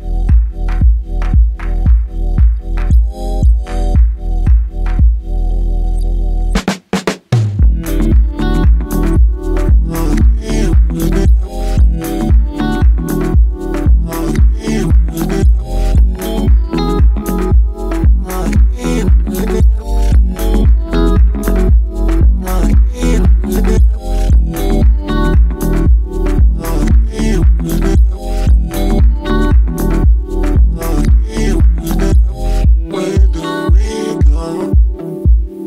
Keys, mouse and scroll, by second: 2.6 click, 3.5-8.6 drag, 8.6-9.1 scroll down 7, 9.8 click, 10.2-10.8 scroll down 3, 11.0 shift+a, 16.2 KP_7, 17.4 a, 18.2 a, 19.9 click, 20.6 z, 21.3 scroll up 3, 21.8 scroll down 1, 22.3 Tab, 23.6 click, 28.0 x, 29.0-30.8 middle drag, 30.8 click, 32.1 Tab, 33.2 s, 35.0 s.